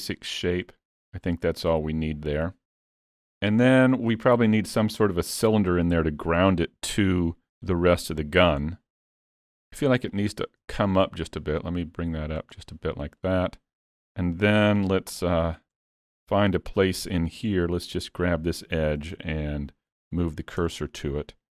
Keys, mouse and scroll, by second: 1.4 middle click, 3.4-3.8 scroll up 2, 3.8 shift+middle click, 5.5 middle click, 9.1 middle click, 10.2 shift+click, 11.2 click, 12.5 scroll up 1, 12.6 middle click, 13.4-14.3 scroll down 3, 13.7 middle click, 14.6 alt+a, 15.2 click, 15.8 Tab, 17.6 2, 18.0 click, 19.1 shift+s, 20.6 Tab.